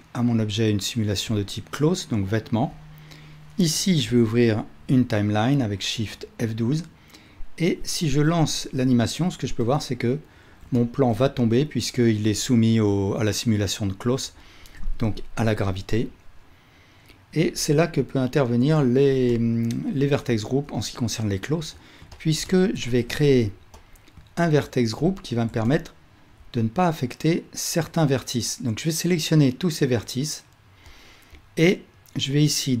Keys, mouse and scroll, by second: 1.4-6.9 middle drag, 4.1 shift+F12, 7.4-8.1 middle drag, 8.1 space, 9.1 space, 11.7-12.2 middle drag, 14.8 space, 15.5 space, 20.0-23.9 alt+middle drag, 22.9 Tab, 25.0 ctrl+middle click, 25.7 alt+click, 25.8 alt+middle click.